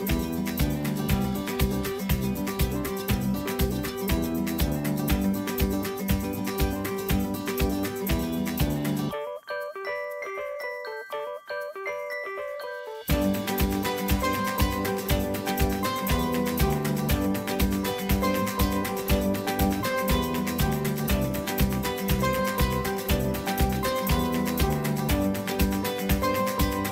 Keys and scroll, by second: 3.8-5.2 typing, 5.5 Return, 8.5 ctrl+v, 12.2 Return, 25.9-26.9 typing.